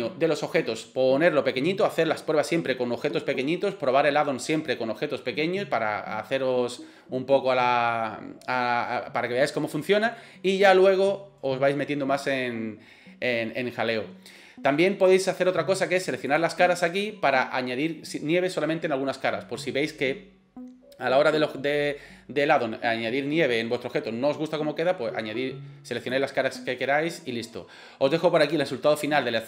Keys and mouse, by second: 16.3 click, 26.0 click.